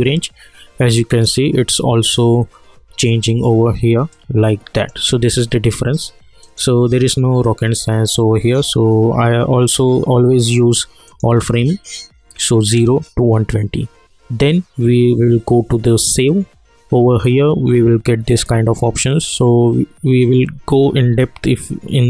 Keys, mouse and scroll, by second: 1.1 click, 4.1-6.4 drag, 11.0 click, 15.9 click.